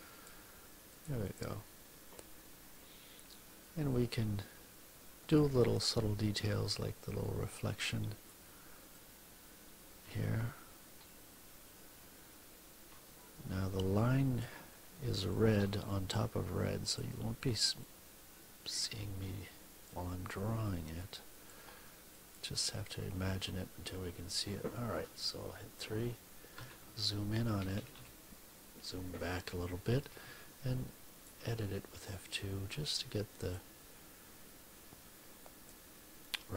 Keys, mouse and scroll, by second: 0.8 click, 5.1 click, 7.1-8.4 drag, 8.9-14.5 drag, 15.2-17.1 shift+drag, 17.7-21.6 drag, 22.1 click, 26.5 3, 27.5 -, 28.4 ., 29.9 F2, 31.1 click, 32.3-33.7 drag, 34.4-35.8 drag.